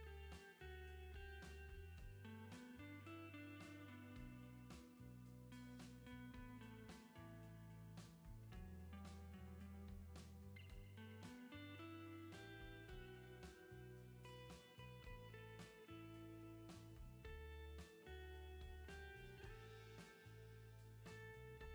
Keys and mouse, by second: 4.5 ctrl+z, 6.2 middle click, 7.2 middle click, 9.4 ctrl+z, 9.5 ], 10.0 ctrl+z, 10.1 ], 10.2 ], 11.8 ctrl+z, 12.0 [, 12.1 [, 12.5 ctrl+z, 13.0 click, 14.1 ctrl+z, 15.1 ctrl+z, 16.2 ctrl+z.